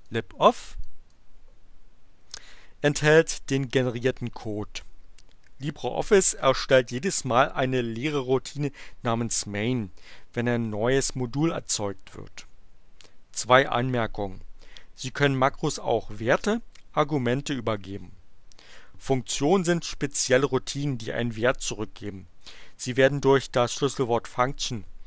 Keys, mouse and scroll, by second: 0.7 click.